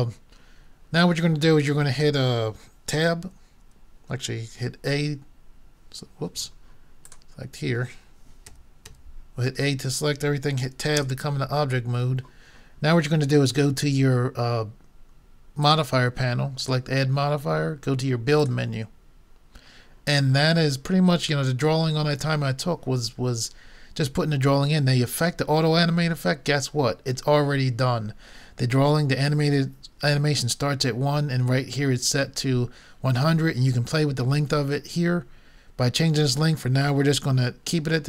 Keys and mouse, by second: 4.8 a, 7.1-8.8 drag, 8.5 a, 8.9 a, 11.1 Tab, 15.7-18.5 drag.